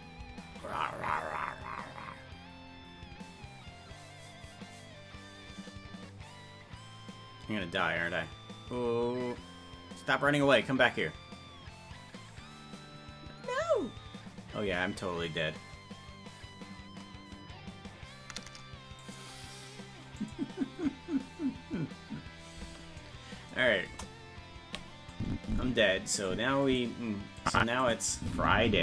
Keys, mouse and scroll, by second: 23.9 KP_0, 25.1-26.3 drag, 26.7 click, 27.4 click, 27.8 click.